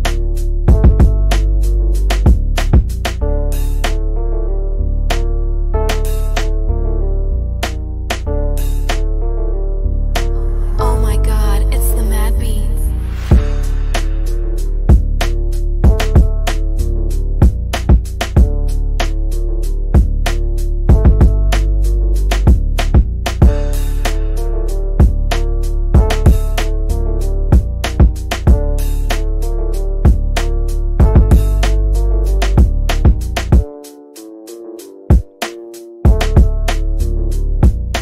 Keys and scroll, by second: 1.2 shift+Page_Down, 5.2 shift+Page_Down, 21.3 ctrl+q, 26.9 Escape, 31.0 Escape, 36.9 Up.